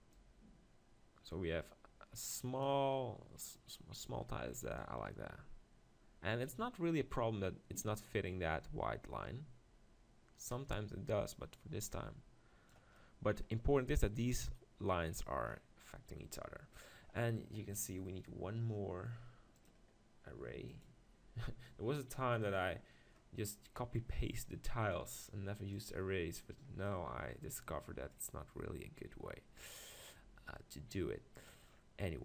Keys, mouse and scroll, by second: 0.1-2.0 drag, 4.8-6.6 drag, 13.0-15.5 middle drag, 15.5-15.9 scroll up 1, 15.9-17.7 middle drag, 20.8-24.4 drag, 25.9-27.7 drag, 26.9-28.7 middle drag, 30.9-32.2 middle drag.